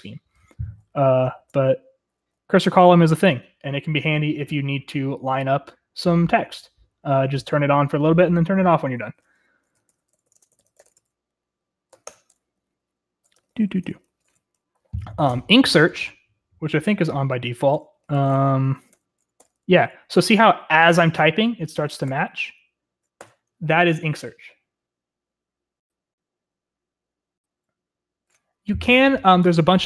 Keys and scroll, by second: 0.8-4.0 typing, 9.8-11.3 typing, 12.3 Tab, 12.6 Return, 12.8-14.7 typing, 17.6-20.1 typing, 22.0 typing, 23.2 typing.